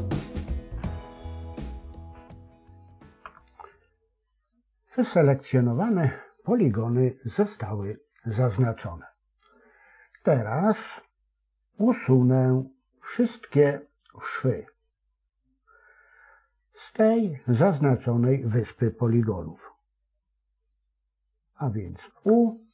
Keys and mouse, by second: 0.6 shift+click, 0.8 shift+click, 1.0 shift+click, 1.2 shift+click, 1.6 middle click, 2.0 middle click, 3.1 KP_7, 22.0 u.